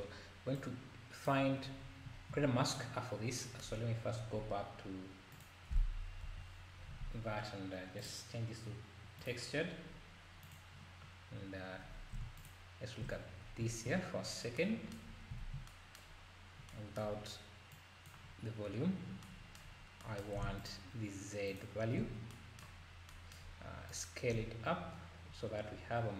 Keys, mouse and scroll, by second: 1.8 scroll down 1, 2.4-2.8 scroll up 2, 3.2 scroll down 4, 4.1-4.5 scroll down 10, 5.3 click, 6.2 KP_Divide, 6.8-7.3 scroll up 2, 7.3-8.0 scroll down 2, 8.0-10.5 drag, 11.3 scroll down 3, 11.7 scroll up 3, 12.5 ctrl+shift+click, 13.4 scroll down 1, 15.1-15.4 scroll up 3, 15.4 ctrl+s, 17.7 click, 19.8 scroll up 3, 20.7 ctrl+shift+click, 21.6 ctrl+shift+click, 22.9 scroll up 1, 23.9-26.1 drag.